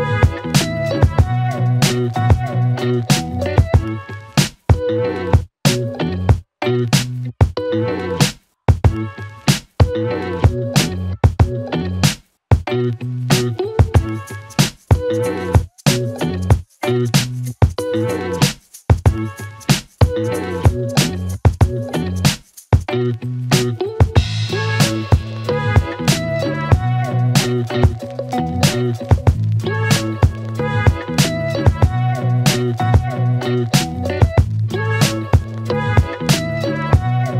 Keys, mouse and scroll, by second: 1.5 click, 4.7 click, 6.4 shift+a, 7.4-9.1 typing, 13.0 click, 14.9 click, 18.6 ctrl+k, 21.0-22.0 click, 27.7 click, 29.9 click, 33.1 click, 36.2 click.